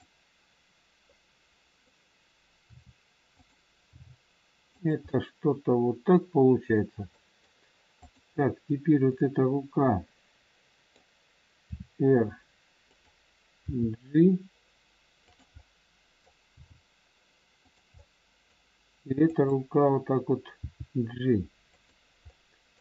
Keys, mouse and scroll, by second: 1.0 middle click, 2.7 r, 3.9 g, 5.1 middle click, 7.1 middle click, 7.1 scroll up 1, 7.9 click, 9.1 middle click, 11.7 r, 13.6 g, 15.5 middle click, 16.5 g, 18.0 middle click, 19.3 click, 20.6 g, 22.2 middle click.